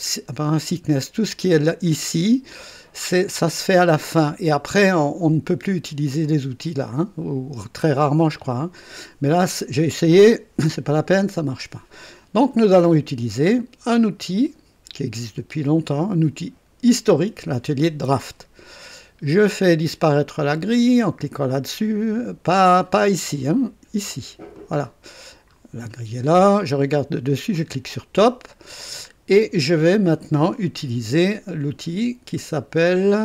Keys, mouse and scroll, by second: 17.0 click, 24.5 click, 25.5 scroll up 1, 27.5 click, 28.6-29.0 scroll down 2.